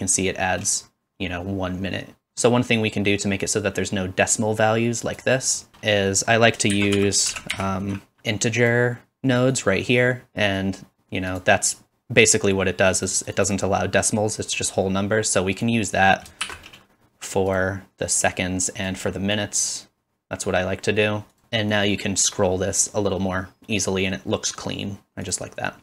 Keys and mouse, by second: 2.3-3.5 middle drag, 3.5-5.2 drag, 5.2 middle click, 6.7 shift+click, 6.7 shift+a, 8.6-11.4 drag, 11.4-13.0 middle drag, 13.0-17.6 drag, 16.4 shift+d, 17.6-18.2 middle drag, 18.2-23.8 drag, 23.8-25.2 middle drag, 25.2-25.8 drag.